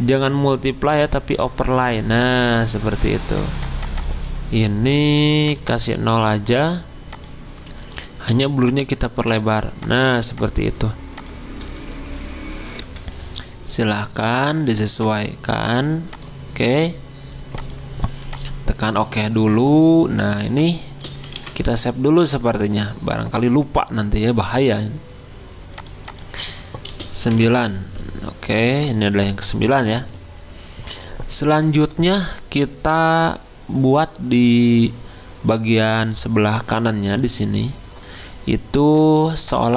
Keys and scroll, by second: 5.2 0, 5.9 0, 12.8 F10, 21.3 ctrl+s, 28.2 9.